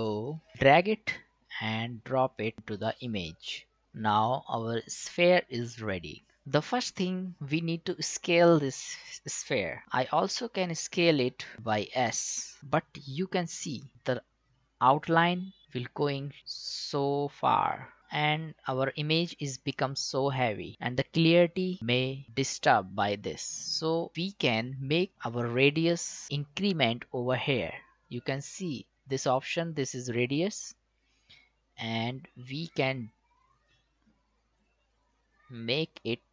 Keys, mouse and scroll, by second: 1.1-6.2 drag, 10.3 click, 12.6 s, 15.6-20.7 drag, 24.1 click, 28.7 click, 31.8-36.3 drag.